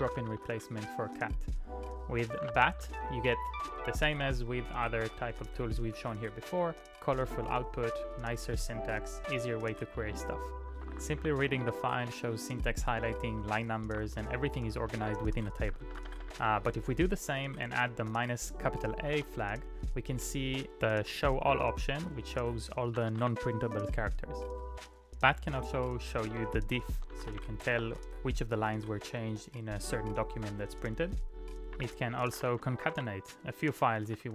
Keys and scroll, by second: 0.0-1.0 typing, 2.6 [, 2.8 ctrl+u, 3.0 ctrl+u, 3.5 ctrl+u, 4.9-5.8 typing, 8.3 typing, 10.5-11.8 typing, 11.9 Return, 13.9 c, 14.2 Return, 14.2 l, 15.3 ctrl+p, 15.4-19.1 typing, 19.3 Return, 22.8-24.0 typing, 26.1 ctrl+d, 26.8-28.2 typing, 31.5-34.3 typing.